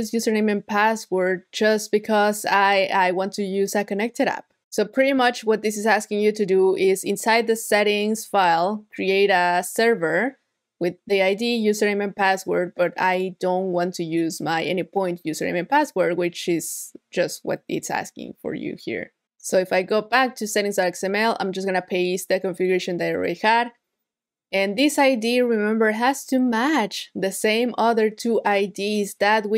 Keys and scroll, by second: 21.0 super+v.